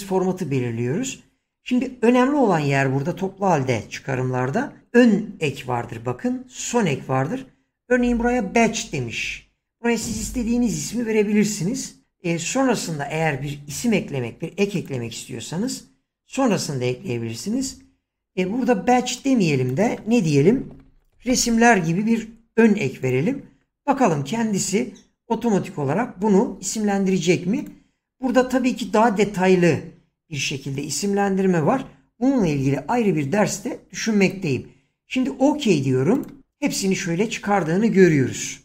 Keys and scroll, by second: 20.2-22.0 typing.